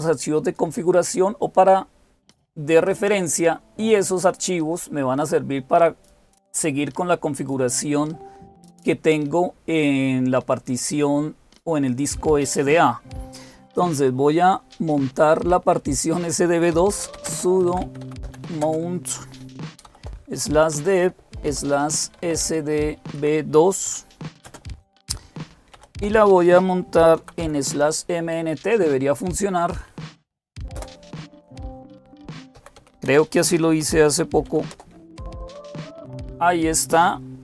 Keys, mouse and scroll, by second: 16.6-18.4 typing, 19.7-24.3 typing, 25.6 typing, 27.0-27.7 typing, 30.6 Return, 31.6-34.5 typing.